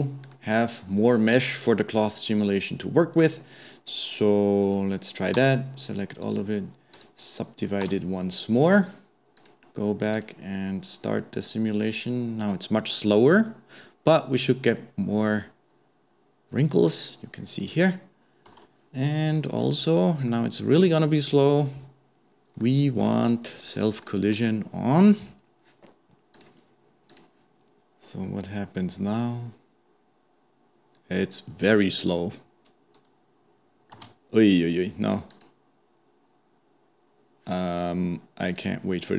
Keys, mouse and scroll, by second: 0.3-3.2 middle drag, 3.2 scroll down 2, 3.4-4.2 scroll up 2, 4.2-5.4 scroll down 1, 5.4 a, 6.2-8.4 right drag, 8.4 Tab, 9.4-11.5 drag, 18.7 space, 19.4 click, 20.3-23.7 middle drag, 23.7-24.1 drag, 24.1-25.3 middle drag, 25.3 click, 26.4 drag, 27.1-33.4 drag, 36.9 click, 38.8 drag.